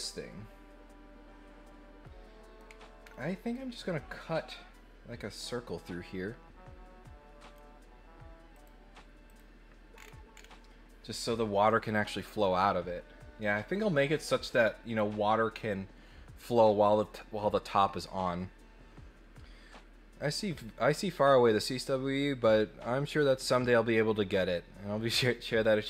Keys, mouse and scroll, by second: 3.0 scroll down 1, 8.5 click, 9.2 click, 9.9-10.4 scroll down 2, 13.9-14.5 scroll up 3.